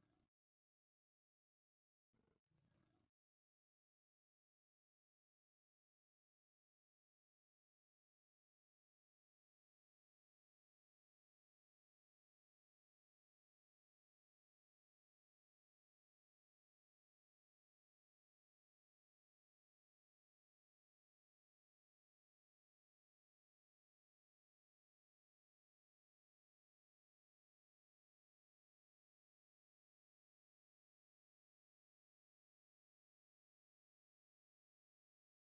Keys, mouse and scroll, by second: 0.2 e, 0.4 KP_Decimal, 0.6 KP_0, 0.7 KP_5, 1.3 KP_Enter, 1.9 e, 2.2 KP_Decimal, 2.4 KP_0, 2.6 KP_5, 3.0 KP_Enter, 5.3-12.3 typing, 6.3 KP_Enter, 7.6 KP_Enter, 8.6 KP_Enter, 9.8 KP_Enter, 11.2 KP_Enter, 12.4 KP_Enter, 13.8 shift+middle click, 15.5 e, 15.8 KP_Decimal, 16.6 KP_0, 16.8 KP_5, 17.5 KP_Enter, 18.5 e, 18.7 KP_Decimal, 18.8 KP_0, 19.0 KP_5, 19.4 KP_Enter, 21.1 shift+middle click, 24.9 ctrl+r, 26.4 right click, 27.0 a, 27.2 c, 29.3 right click, 30.7 Delete, 32.8 click, 33.7-34.9 drag.